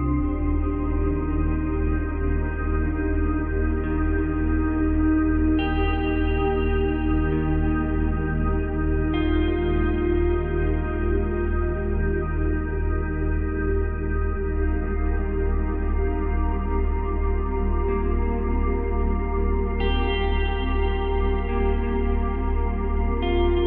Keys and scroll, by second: 2.9 ctrl+z, 21.4 space, 23.1 space.